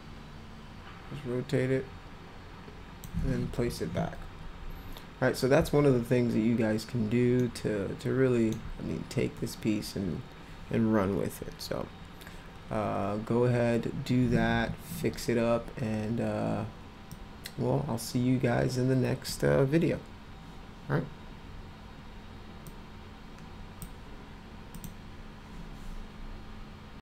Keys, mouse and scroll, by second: 3.6 w, 7.4-8.5 alt+middle drag, 17.1-19.3 drag, 22.7-23.8 drag, 24.8 click.